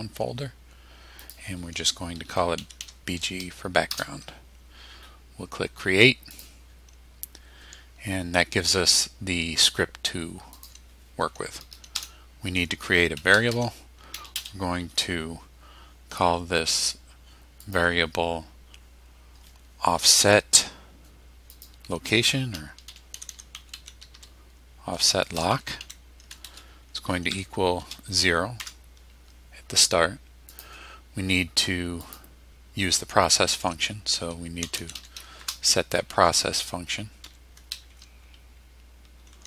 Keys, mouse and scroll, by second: 1.2 click, 2.3-3.3 typing, 3.9 Return, 6.3 click, 10.5 click, 11.9 Return, 12.9-14.3 typing, 17.6 click, 21.5 click, 22.6-28.6 typing, 30.5 click, 32.0 click, 34.4-35.9 typing, 37.2 p, 39.2 Down.